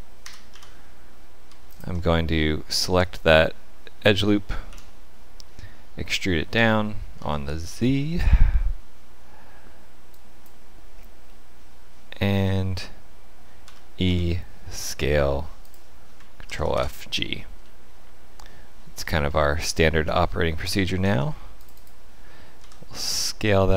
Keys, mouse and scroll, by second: 0.1 Delete, 1.6 alt+click, 3.0 middle click, 4.6 KP_1, 6.5 e, 11.2 middle click, 13.6 e, 16.4 ctrl+f, 17.5 middle click, 19.0 scroll up 2, 19.5 shift+middle click, 20.9 ctrl+r, 22.5 s.